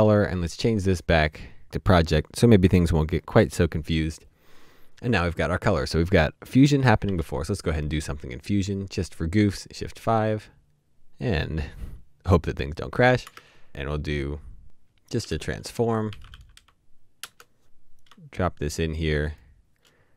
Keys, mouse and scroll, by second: 7.1 shift+5, 13.2 shift+5, 13.3 shift+space, 15.4-17.1 typing.